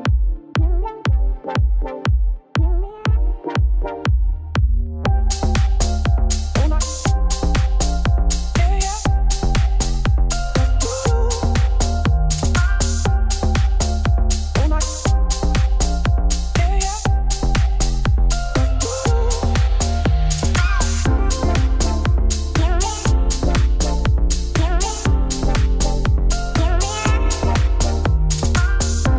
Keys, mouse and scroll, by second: 0.5 Tab, 1.7 shift+middle click, 1.9-2.3 scroll up 2, 2.3 middle click, 2.8-3.2 scroll up 2, 3.2 KP_Decimal, 4.3 click, 4.6 Tab, 4.9 Tab, 5.0-5.5 scroll down 9, 6.5 shift+middle click, 6.7 scroll down 2, 7.8 Left, 9.4 click, 11.2 click, 12.0-13.0 shift+middle drag, 13.0-14.0 drag, 14.0 Tab, 15.5-16.6 drag, 16.6 Tab, 18.0 click, 18.9 click, 19.7 middle click, 20.0-20.4 scroll up 1, 20.4 click, 21.2 click, 21.6 middle click, 22.6 click, 23.0 middle click, 24.2 middle click, 24.6 click, 25.4 click, 26.2 click, 26.6 middle click, 27.8 click, 28.1-29.1 middle drag.